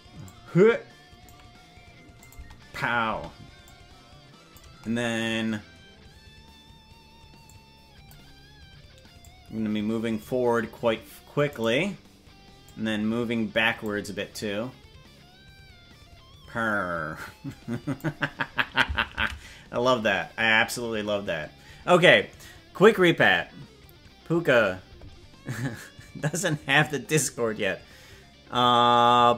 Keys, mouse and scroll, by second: 0.2-1.2 drag, 2.2 click, 2.4 space, 3.2 space, 3.6 click, 7.4 click, 9.1-10.2 drag, 11.6 right click, 12.6-13.8 drag, 14.3-18.0 drag, 21.0 ctrl+s.